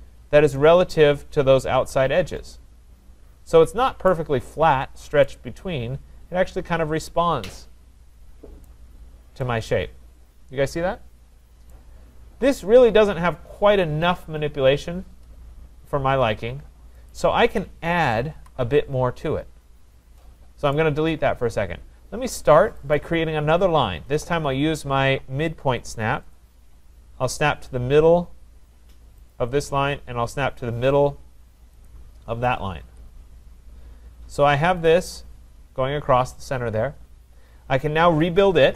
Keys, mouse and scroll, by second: 0.1-0.5 scroll, 4.1 right click, 4.4-5.2 scroll, 8.6 right click, 8.9-9.4 scroll, 11.7 right click, 12.4-13.4 scroll, 17.1 click, 18.4 Delete, 19.7 middle click, 20.4 middle click, 20.7 right click, 22.9 click, 26.3 click, 29.3 click, 31.8 click, 32.8 Return, 35.0 click, 38.3-38.7 typing.